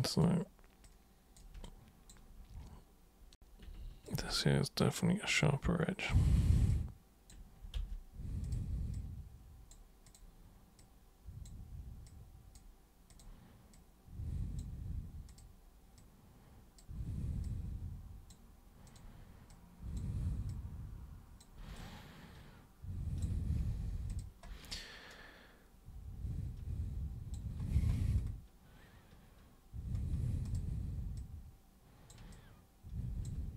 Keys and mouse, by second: 0.2 super+click, 0.9 super+click, 1.7-2.1 alt+super+drag, 4.0 ctrl+shift+super+click, 4.7 super+click, 5.9 super+click, 6.7 super+click, 7.7 ctrl+super+z, 8.4 super+click, 8.9 super+click, 10.0 super+click, 10.7 super+click, 12.0 super+click, 13.1 super+click, 13.7 super+click, 15.2 super+click, 15.9 super+click, 17.4 super+click, 18.8 super+click, 19.5 super+click, 20.5 super+click, 21.8-23.2 alt+super+drag, 24.0 super+click, 24.7-27.3 alt+super+drag, 30.4 super+click, 31.1-32.1 super+drag, 32.3-33.2 alt+super+drag.